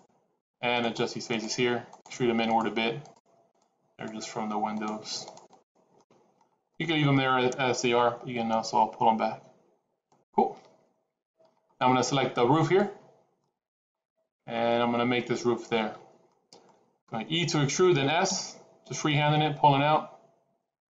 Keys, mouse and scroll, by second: 0.7 shift+click, 2.2 click, 2.7 click, 2.9 shift+click, 3.4 shift+click, 3.8 shift+click, 5.5 shift+click, 5.8 shift+middle click, 6.6 middle click, 8.5 e, 12.5 click, 13.3 middle click, 15.9 middle click, 16.1 middle click, 17.5 e.